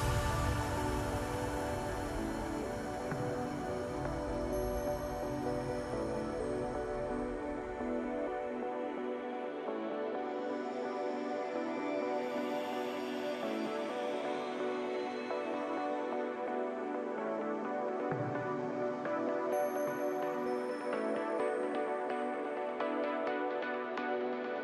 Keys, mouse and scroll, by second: 1.3-3.7 drag, 3.7 KP_Divide, 4.6 KP_7, 5.2-6.0 scroll down 4, 6.0 s, 8.5-9.2 scroll up 2, 9.2 Tab, 9.4-10.4 scroll up 3, 10.4 2, 11.2 click, 11.9 s, 13.9 click, 14.8 e, 18.7 ctrl+r, 21.5 ctrl+r.